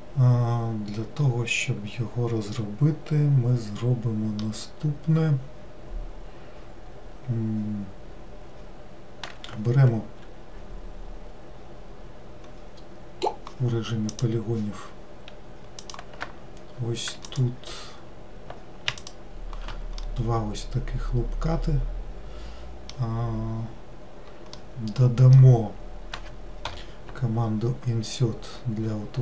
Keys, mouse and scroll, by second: 14.2-16.0 drag, 17.3 alt+click, 19.0 alt+shift+click, 20.0-23.1 middle drag, 24.6-26.7 middle drag.